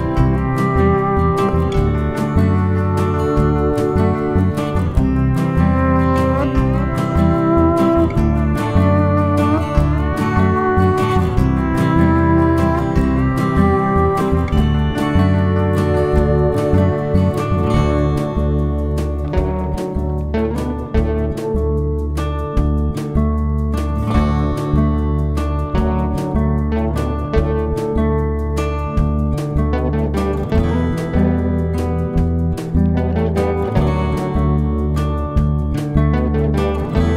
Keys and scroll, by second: 0.5 F1, 3.3 F1, 3.9 space, 6.2 ctrl++, 6.8 F7, 7.2 F1, 8.0 Page_Down, 12.3 shift+F6, 16.1 F7, 16.8 F1, 18.3 shift+F6, 21.8 F1, 23.0 -, 23.4 +, 24.4 shift+F6, 25.4 BackSpace, 29.1 F1, 29.6 ctrl+-, 30.9-31.4 typing, 36.0 F1.